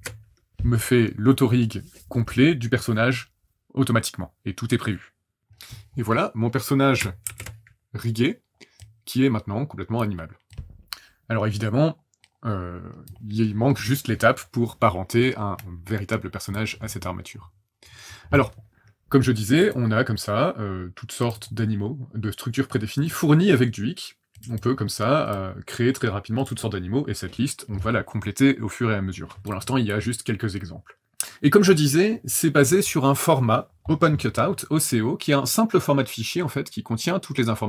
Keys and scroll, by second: 7.2 ctrl+shift+h.